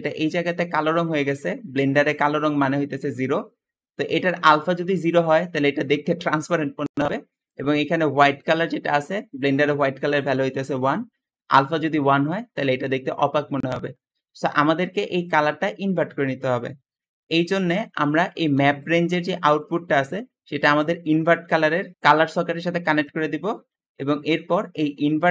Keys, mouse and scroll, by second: 14.1 Escape, 14.1 Escape, 18.2 g, 20.7-22.0 drag, 22.9 click, 23.5 middle click, 23.5-23.9 scroll down 2, 25.2-25.3 drag.